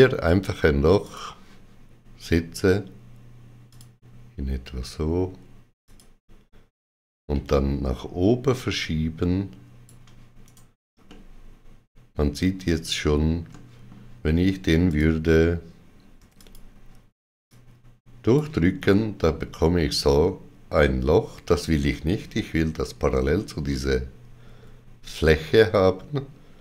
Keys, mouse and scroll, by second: 0.9 click, 3.6 click, 5.7 click, 7.2 g, 8.4 click, 10.3 right click, 11.3 middle click, 13.4 middle click, 14.8 click, 16.0 3, 16.2 click, 17.4 click, 18.7 middle click.